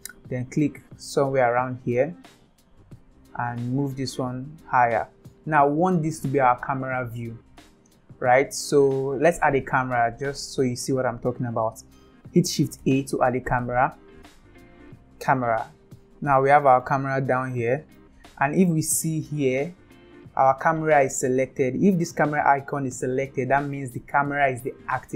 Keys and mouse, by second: 3.8-5.1 drag, 12.8 shift+a, 16.2-16.8 middle drag, 17.9-18.6 middle drag.